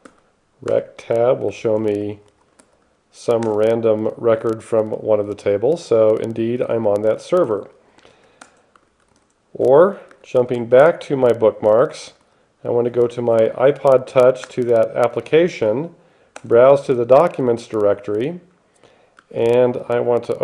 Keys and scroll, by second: 0.0-3.1 typing, 1.0 Tab, 3.7 Return, 7.8-9.2 typing, 9.6 Return, 10.4 x, 12.1-13.0 typing, 14.7 Return, 16.6 Return, 19.4 alt+x, 19.8-20.4 typing.